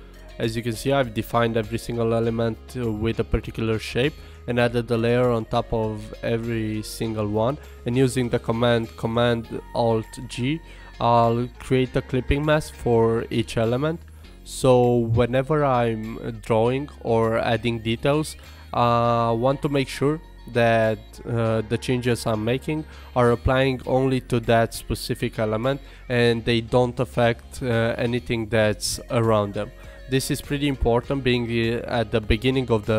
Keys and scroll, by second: 0.2 alt+super+g, 2.3 alt+super+g, 5.1 alt+super+g, 8.2 alt+super+g, 10.5 alt+super+g, 11.7 alt+super+g, 14.9 alt+super+g.